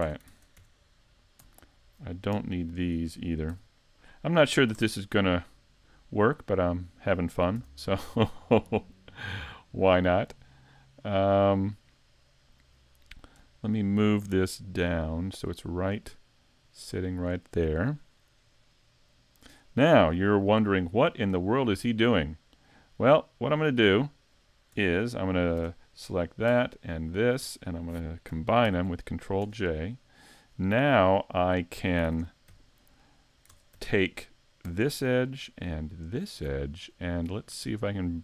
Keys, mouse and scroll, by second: 0.0 Tab, 2.8 alt+right click, 3.5 x, 4.5 scroll down 2, 4.8 Tab, 5.2 middle click, 7.6 s, 8.8 click, 9.1 middle click, 13.4 KP_1, 14.5 KP_5, 16.0 click, 18.5 middle click, 19.6 scroll up 3, 20.2 middle click, 21.0 shift+middle click, 21.6 middle click, 22.9 scroll down 2, 23.3 middle click, 24.8 Tab, 25.6 Tab, 26.1 right click, 27.0 shift+right click, 28.7 ctrl+j, 29.4 Tab, 29.9 middle click, 31.6 middle click, 32.1 ctrl+Tab, 33.5 ctrl+Tab, 35.0 alt+right click, 36.1 alt+shift+right click, 36.7 middle click.